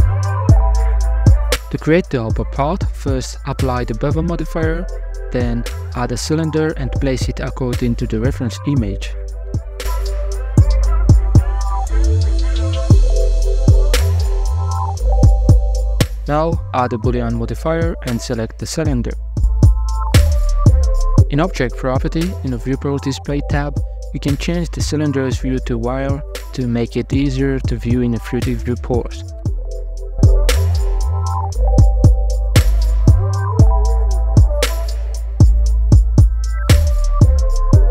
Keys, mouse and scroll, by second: 1.6 scroll up 2, 1.9 right click, 3.4-5.0 drag, 5.0-5.7 middle drag, 5.7 shift+a, 8.3 scroll down 8, 8.5-12.0 typing, 10.2 scroll up 2, 10.6 shift+middle click, 11.7 middle click, 11.9 alt+z, 11.9 middle click, 12.5 middle click, 12.6 right click, 13.1 g, 13.6 scroll down 5, 13.6 middle click, 13.8 h, 13.9 middle click, 15.3-15.9 scroll up 5, 15.9-16.5 middle drag, 16.5-16.9 scroll up 3, 18.5 click, 21.7 right click, 21.9-22.6 scroll down 3, 22.6-23.9 drag, 23.9 scroll down 1, 23.9-24.4 middle drag, 24.4 a, 24.6 a, 24.7 middle click, 24.8 right click, 25.1-27.4 middle drag, 27.4 Tab, 27.8 middle click, 28.3 ctrl+r, 28.3 click, 29.9 click, 30.4 Tab, 31.1 ctrl+r, 34.0 scroll up 2, 34.4 middle click, 34.7 ctrl+z, 35.6 Tab, 36.0 scroll down 1, 36.2-37.2 middle drag, 37.2-37.9 scroll up 3.